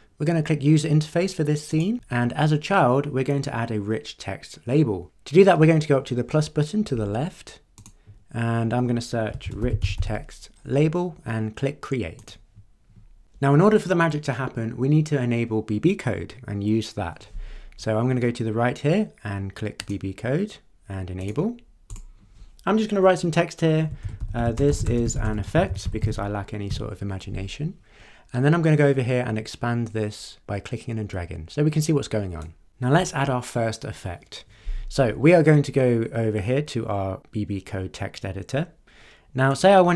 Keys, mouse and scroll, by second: 1.7 click, 7.8 click, 9.2-10.5 typing, 12.2 click, 19.8 click, 21.2 click, 21.9 click, 23.7-26.6 typing, 30.2-32.6 drag, 39.5 click.